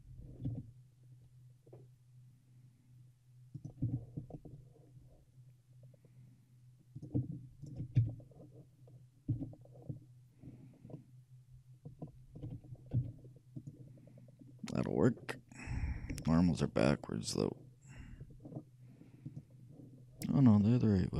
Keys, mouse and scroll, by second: 0.5 e, 3.9 e, 7.7-9.5 shift+right drag, 8.1 f, 9.4 f, 11.0-12.7 middle drag, 12.5 a, 13.0 z, 13.8-15.9 middle drag, 16.2 n, 19.3-21.1 drag, 20.7-21.1 middle drag.